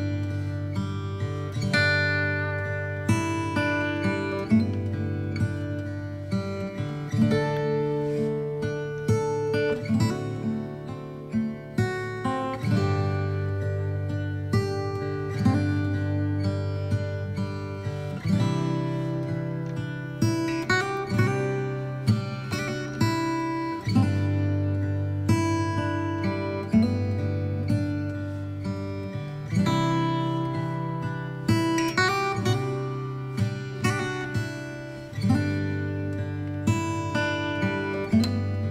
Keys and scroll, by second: 7.3 ctrl+j.